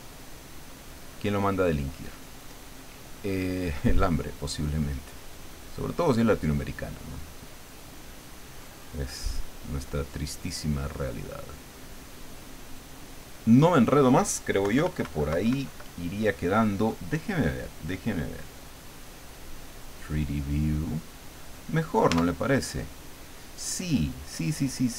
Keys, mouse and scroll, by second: 2.1-3.8 drag, 4.1-6.2 drag, 6.8-8.4 drag, 8.9-11.3 drag, 11.7 click, 14.6 KP_Subtract, 18.7 click, 19.7 click, 22.1 Tab.